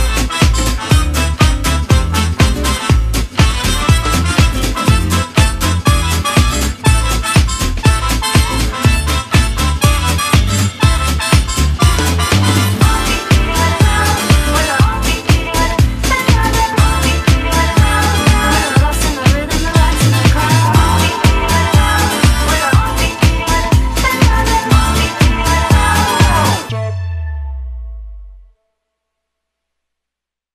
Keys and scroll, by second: 30.4 space.